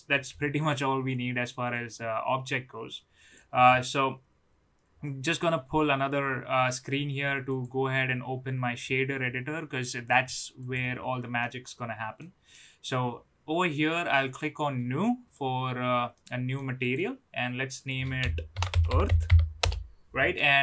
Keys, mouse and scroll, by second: 1.7-3.2 drag, 7.4-10.7 drag, 11.4 middle click, 12.5 middle click, 15.2 click, 16.1 middle click, 16.8 click, 17.7-19.7 drag.